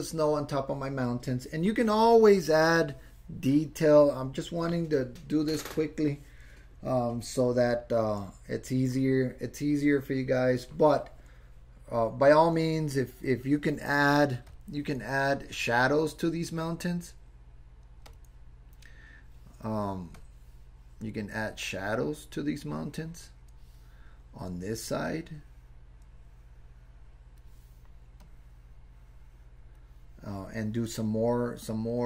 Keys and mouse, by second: 14.5 click, 21.5-23.5 drag, 24.7-27.4 drag, 28.2-29.8 drag.